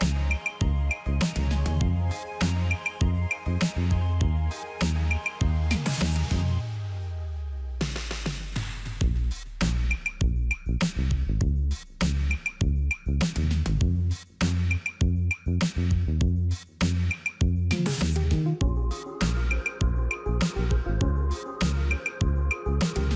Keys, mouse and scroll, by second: 3.5 double click, 16.8 ctrl+z.